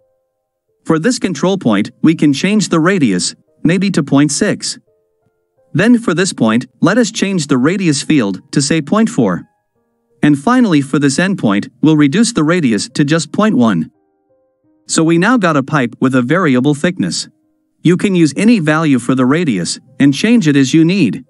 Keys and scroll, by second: 15.7 n.